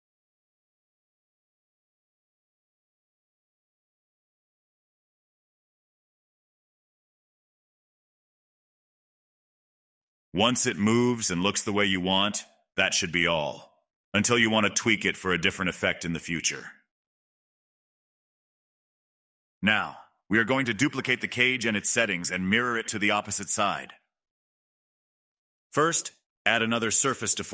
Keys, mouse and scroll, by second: 4.6-5.0 shift+middle drag, 5.0-6.7 scroll down 13, 6.7-7.7 scroll up 8, 7.7-10.4 drag, 12.0-15.1 drag, 15.1-17.8 middle drag, 17.8 scroll down 2, 18.1-23.6 middle drag, 23.6 click, 24.5 click, 26.0-27.5 drag.